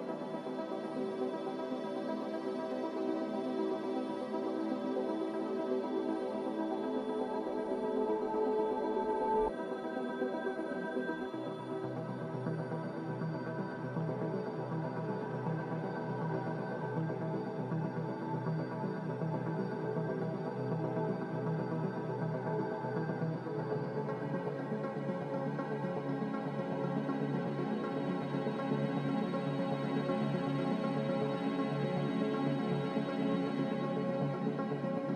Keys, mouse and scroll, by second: 4.9 ctrl+w, 10.5 a, 11.6 a.